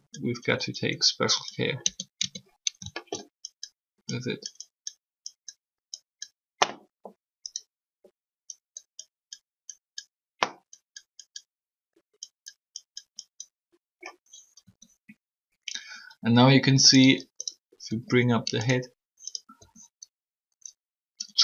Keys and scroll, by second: 1.8 Tab, 2.2 Tab, 14.6 r, 17.8 r.